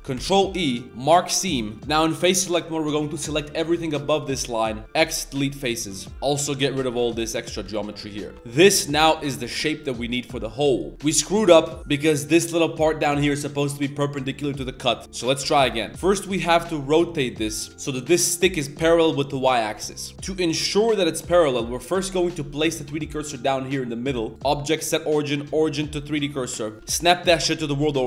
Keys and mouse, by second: 1.5 middle click, 1.7 a, 4.1 click, 4.5 click, 6.1 Tab, 6.1 click, 6.1-8.3 typing, 6.5 Tab, 8.3 Tab, 8.5 click, 9.0 middle click, 9.2 shift+click, 9.6 click, 10.3 middle click, 10.5 middle click, 10.9 ctrl+z, 11.1 click, 11.5 click, 11.8 KP_7, 11.8 z, 15.4 ctrl+z, 15.9 shift+s, 16.1 r, 19.6 shift+middle click, 20.6 Tab, 21.3 click, 21.5 middle click, 22.3 shift+s, 24.1 click, 24.3 Tab, 24.4-26.2 drag, 26.6 middle click, 26.7 shift+s, 27.4 shift+s, 27.9 shift+drag.